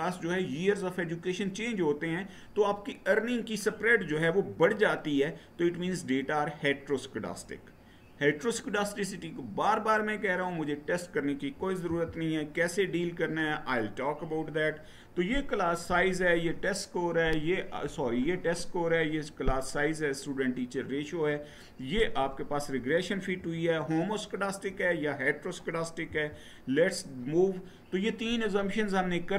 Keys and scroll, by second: 11.6 Right, 25.8 Right.